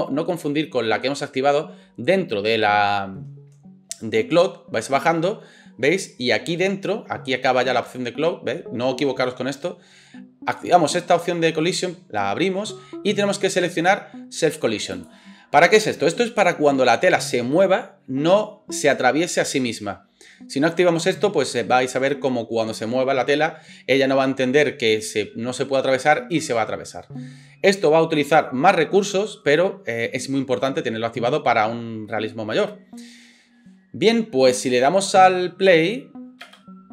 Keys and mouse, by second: 15.0-36.9 middle drag, 36.4 space.